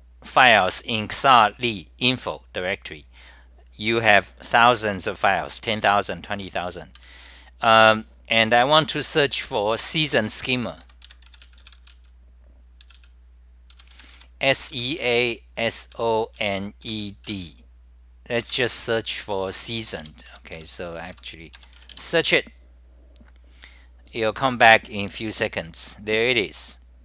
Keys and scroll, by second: 7.1 g, 10.2-11.7 typing, 13.8 Home, 13.9 ., 14.3 u, 18.4 Home, 19.8-21.6 typing.